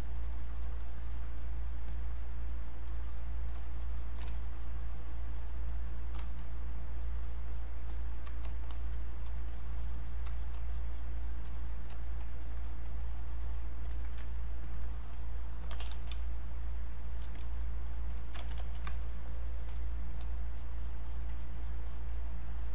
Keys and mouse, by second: 0.3 alt+click, 0.8-3.6 drag, 3.6 shift+click, 4.4 alt+click, 5.7 click, 7.0-8.7 drag, 9.5 click, 10.7 click, 11.5 shift+click, 13.9 alt+click, 14.3 ctrl+right click, 15.4-16.6 typing, 16.6 click, 17.6 alt+click, 18.4 ctrl+z, 19.7 click, 22.6 alt+click.